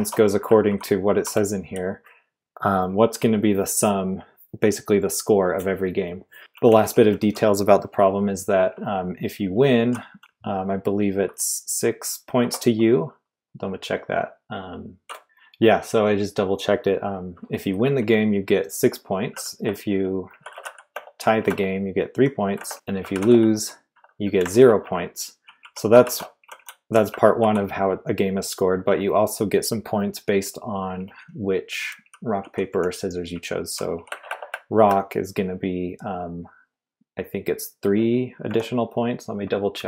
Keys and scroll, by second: 0.0-1.6 typing, 6.4 typing, 8.7-10.7 typing, 12.4 typing, 17.8 typing, 19.2-27.4 typing, 30.9-34.7 typing, 38.5-39.5 typing.